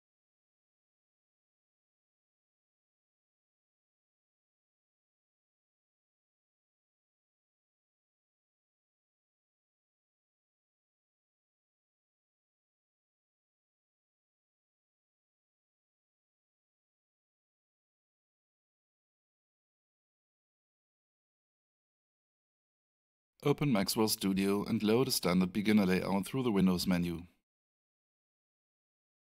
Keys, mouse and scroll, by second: 0.5 click, 6.8 click, 8.6 Return, 12.7 click, 22.7 click, 25.9 click, 26.1 double click.